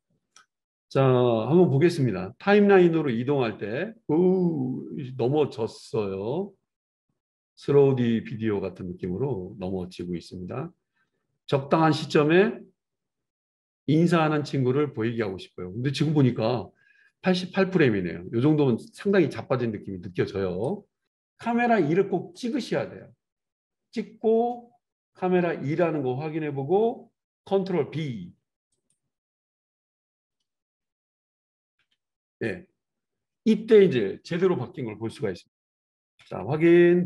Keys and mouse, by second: 17.6 click, 22.5-28.7 middle drag, 28.7-35.7 drag, 31.8 ctrl+b, 35.7-37.0 super+middle drag.